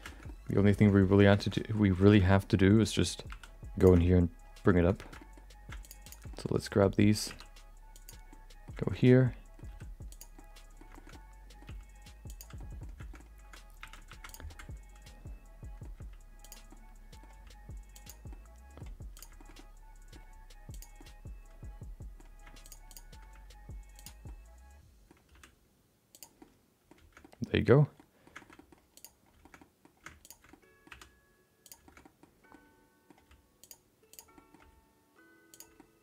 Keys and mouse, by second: 0.1 shift+middle click, 0.2 middle click, 0.9 middle click, 1.3 shift+middle click, 1.5 middle click, 2.1 shift+middle click, 2.2 middle click, 3.3 2, 3.8 click, 5.0 middle click, 5.2 middle click, 5.8 click, 6.0 click, 6.3 middle click, 7.9 e, 8.4 middle click, 9.0 middle click, 9.4 middle click, 9.7 r, 10.4 middle click, 11.0 middle click, 11.7 g, 12.7 middle click, 13.8 1, 14.1 shift+2, 14.3 click, 14.4-15.8 middle drag, 15.9 g, 16.8 middle click, 17.3 g, 18.4 middle click, 19.1 click, 19.3 shift+middle click, 19.5 middle click, 20.2 g, 21.1-22.2 middle drag, 22.6 shift+click, 22.9 shift+click, 23.3 g, 24.3 middle click, 25.3 r, 26.5 middle click, 27.2 middle click, 28.1 middle click, 28.4 shift+middle click, 28.9 click, 29.4 middle click, 29.6 middle click, 30.2 ctrl+shift+click, 30.5 middle click, 31.6 e, 31.9 middle click, 32.6 middle click, 33.1 g, 34.1 click, 34.3 middle click, 34.6 g, 35.7 middle click.